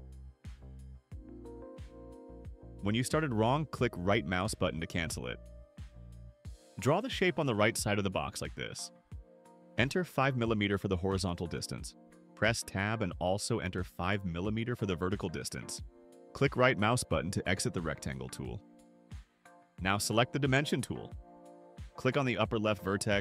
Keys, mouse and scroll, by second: 0.6 scroll up 2, 0.7 scroll down 2, 1.1 scroll up 2, 2.2 click, 4.9 right click, 7.2 click, 10.1 5, 11.8 5, 12.3 Tab, 13.3 5, 14.9 Return, 16.9 right click, 22.2 click.